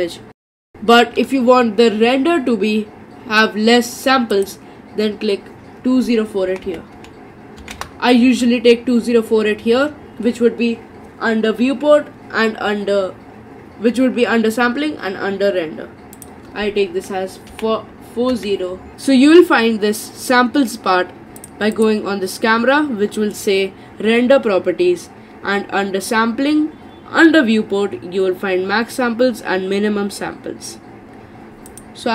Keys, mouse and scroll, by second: 0.4 click, 4.4-7.5 drag, 16.2-18.9 drag, 21.4 click, 21.8 click, 31.7 click.